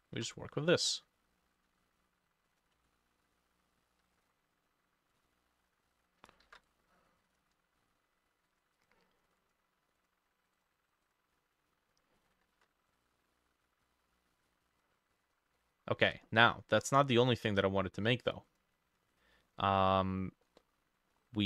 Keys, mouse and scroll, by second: 0.2 ctrl+d, 2.8-10.8 ctrl+drag, 2.8-4.6 ctrl+middle drag, 6.4 ctrl+middle click, 6.5 ctrl+d, 11.1-12.4 drag, 12.6 ctrl+d, 15.2-15.6 scroll up 3, 15.6 middle click, 18.5 double click, 20.5 middle click, 21.2-21.4 scroll up 5.